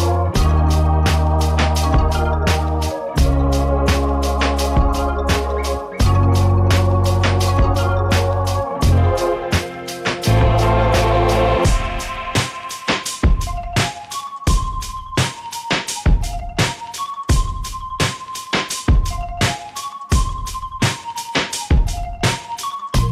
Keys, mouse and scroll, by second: 11.0 click, 17.3 click, 20.9 click.